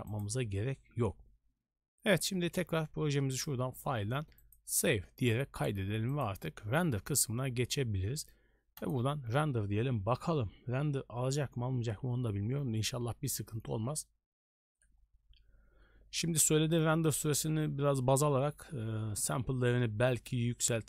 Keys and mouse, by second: 0.2 click, 3.4-5.0 drag, 6.1-9.0 drag.